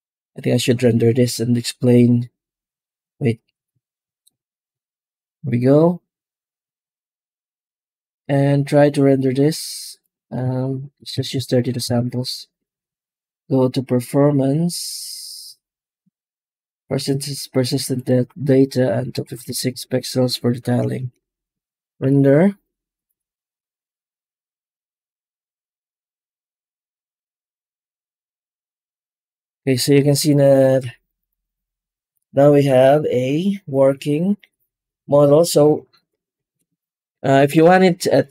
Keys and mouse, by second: 4.1 ctrl+alt+KP_0, 7.5 click, 7.9 click, 9.8-11.7 drag, 14.7 click, 16.8 click, 17.9-19.6 drag, 20.8 ctrl+s.